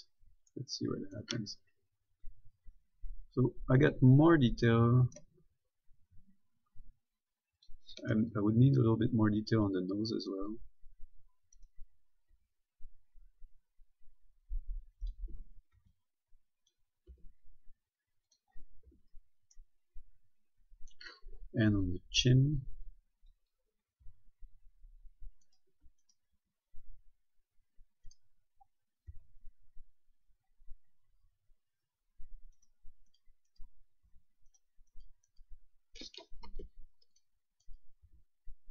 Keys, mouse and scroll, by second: 0.3-0.7 scroll down 1, 0.7 middle click, 3.0 s, 5.3-5.7 typing, 5.4 right click, 7.8 click, 8.4 a, 9.6-10.9 typing, 9.9 click, 11.9 right click, 12.5 s, 15.3 click, 15.6-16.0 typing, 16.2 click, 17.4 s, 18.5 click, 19.1 a, 19.8 middle click, 22.5 b, 22.8 click, 24.3 g, 25.7 right click, 26.0 a, 26.3 right click, 26.6 g, 28.3 right click, 29.4 g, 30.0-30.4 scroll up 1, 32.8 right click, 34.3 g, 34.8 right click, 36.7 ctrl+Tab, 37.4 click, 37.9 right click, 38.3 g.